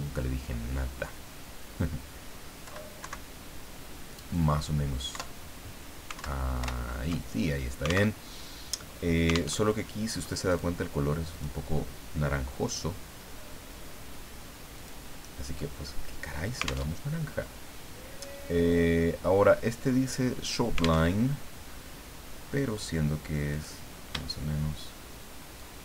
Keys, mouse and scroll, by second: 2.6 Left, 3.0 Right, 5.1 Up, 6.1 alt+Down, 6.6 alt+Up, 8.2 alt+Tab, 9.5 alt+Tab, 10.5 click, 11.3 click, 14.7 click, 15.7 middle click, 17.0 alt+Tab, 21.1 alt+Tab, 22.3 scroll down 2, 23.5 click, 25.6-25.8 shift+drag.